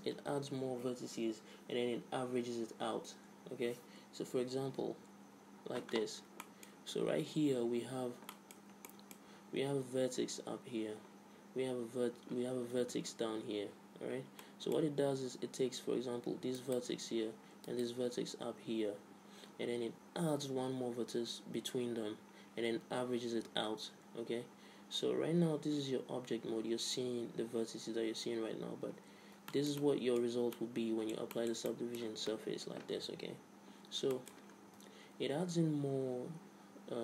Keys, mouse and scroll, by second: 4.7 KP_1, 5.0 KP_5, 6.0 middle click, 6.7 middle click, 16.6-22.0 right drag, 24.7 z, 25.0-26.9 middle drag, 28.9 Tab, 29.2-30.8 middle drag, 31.4-33.0 middle drag, 33.0 KP_1, 33.4 middle click, 33.8 middle click, 34.4 z, 34.9 Tab.